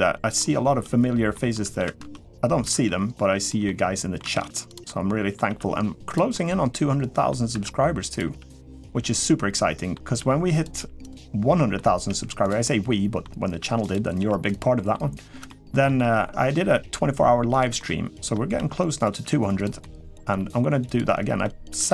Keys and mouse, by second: 1.1 middle click, 1.5 r, 2.6 g, 3.4 middle click, 4.1 shift+d, 4.6 middle click, 5.6 r, 6.1 middle click, 7.3 r, 8.1 g, 8.6-9.7 middle drag, 9.9 r, 10.5 g, 11.0 middle click, 11.8 g, 12.4 middle click, 13.3 r, 14.0 g, 14.5 middle click, 15.3 middle click, 15.8 g, 17.5 middle click, 18.3 r, 19.0 g, 19.6 middle click, 20.2 g, 21.2 middle click, 21.8 r.